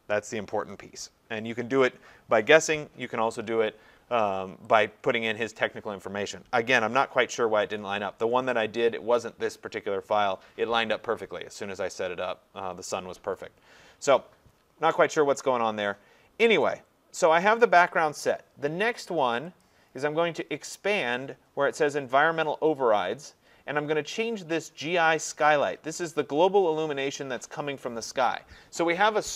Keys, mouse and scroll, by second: 4.8 click, 9.4 click, 19.6-24.7 drag, 26.2 click.